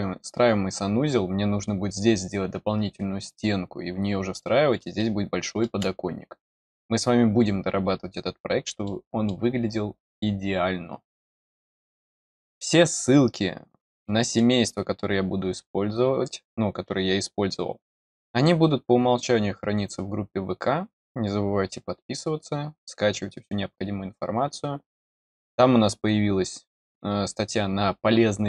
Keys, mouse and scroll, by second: 4.7 scroll up 1, 4.9 middle click, 7.9-8.5 scroll up 1, 8.8 middle click, 11.7 scroll up 1, 11.8 middle click, 13.9 middle click.